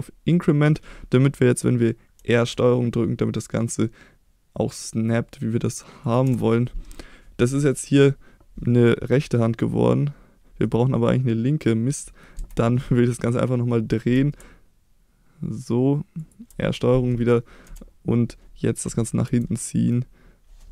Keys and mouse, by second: 2.1 r, 6.0 ctrl+click, 10.6-11.9 middle drag, 12.3 KP_1, 14.1 r, 16.2 ctrl+click, 16.7-17.1 middle drag, 17.6 KP_7, 19.2 g.